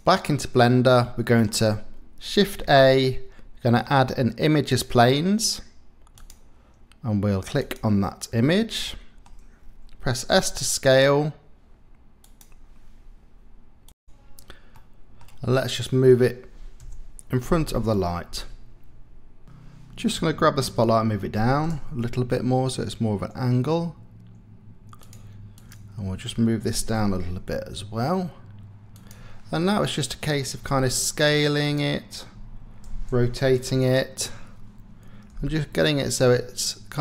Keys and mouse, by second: 1.0 click, 2.6 shift+a, 8.8 click, 10.3 s, 14.7 middle click, 15.8 middle click, 16.9 KP_7, 18.4 g, 21.3 g, 21.6 z, 25.6 click, 26.7 g, 27.1 z, 29.0 click, 30.6 s, 32.8-35.3 typing, 34.3 KP_Enter.